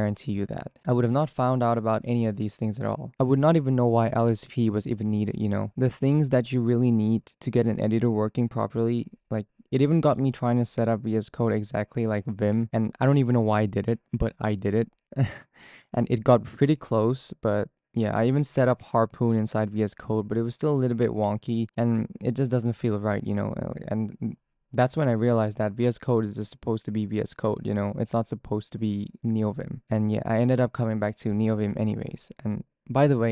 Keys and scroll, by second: 12.0-12.9 typing, 14.1-16.5 typing, 16.7 ctrl+d.